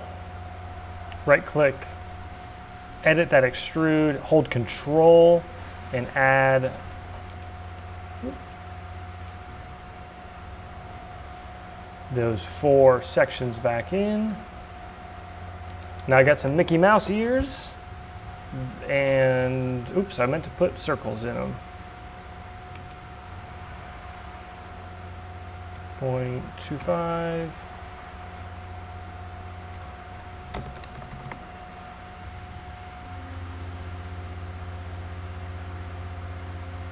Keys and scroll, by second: 23.4 c, 25.7 Delete, 26.6 2, 26.8 Return, 28.1 c, 29.7 Delete, 29.8 2, 30.5 BackSpace, 30.7 2, 30.9 Return.